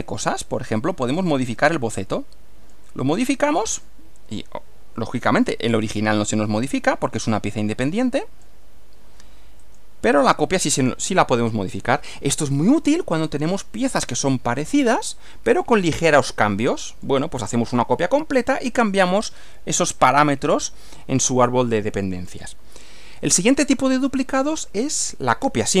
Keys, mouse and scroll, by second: 1.5-2.9 drag, 7.2-8.6 drag, 9.6 click, 10.9-12.1 middle drag, 12.5-13.8 middle drag, 14.1-17.2 middle drag, 21.7-22.6 middle drag, 22.9-24.2 shift+middle drag.